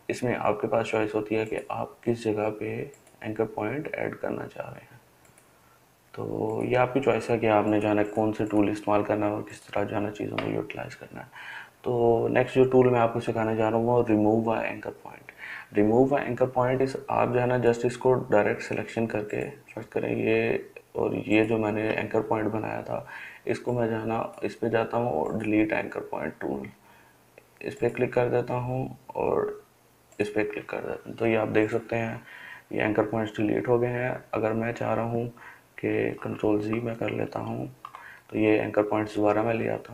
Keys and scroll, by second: 16.8 ctrl+z, 36.2 ctrl+z, 36.9 ctrl+z.